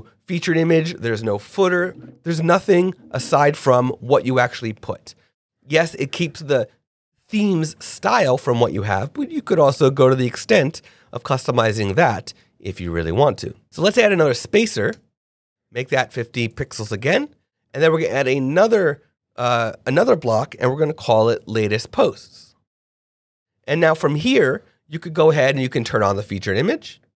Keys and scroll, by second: 13.6 BackSpace, 13.7 /, 14.0 p, 14.1 a, 14.9 Return, 16.5 super+a, 16.8 super+5, 17.1 Return, 21.0 l, 21.3 a.